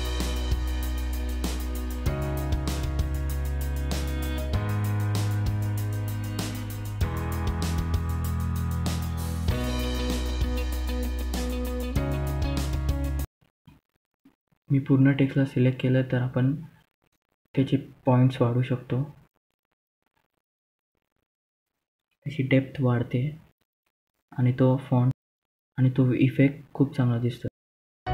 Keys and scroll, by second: 0.9 F4, 4.0 F2, 18.1-19.3 typing, 21.5-22.5 typing, 23.6-23.9 typing.